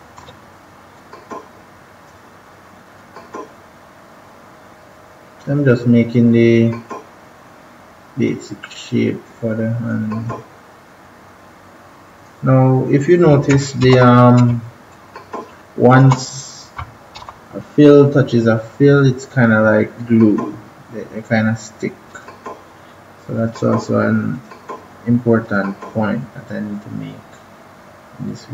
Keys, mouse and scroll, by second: 0.9-13.4 drag, 13.8 ctrl+=, 14.4 space, 16.0 space, 17.1 -, 19.9 click, 22.7-23.3 scroll down 1, 23.3 click, 23.7-24.3 scroll up 1, 24.3 click, 24.7-25.3 scroll down 1, 25.3 click.